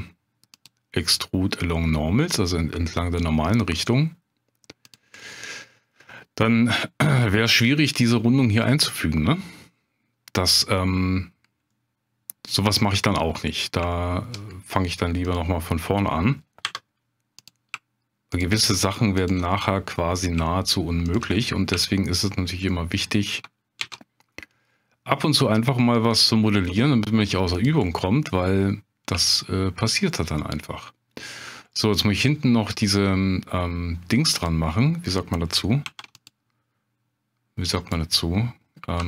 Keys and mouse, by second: 4.8 click, 5.2 middle click, 6.8 middle click, 8.7 middle click, 10.6 middle click, 11.7-12.7 middle drag, 13.5 middle click, 13.9 shift+click, 16.6 2, 19.2 shift+click, 19.5 middle click, 21.1 shift+click, 21.4 middle click, 21.8 shift+click, 22.7 middle click, 23.8 ctrl+b, 27.5 click, 27.8-29.0 middle drag, 29.2 shift+click, 30.1-31.1 middle drag, 31.7 middle click, 34.3 click, 35.8 ctrl+r, 37.7 click, 39.0 3.